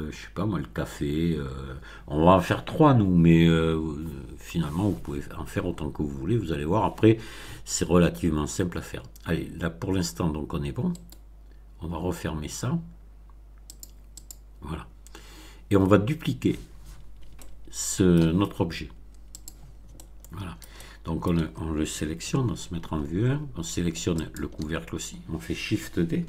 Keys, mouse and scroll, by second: 10.9 right click, 13.7 click, 14.2 click, 14.8-15.2 scroll down 2, 15.9-16.2 scroll down 2, 17.3-18.3 shift+middle drag, 19.3 click, 19.9-21.4 shift+middle drag, 22.1 1, 24.1 shift+click.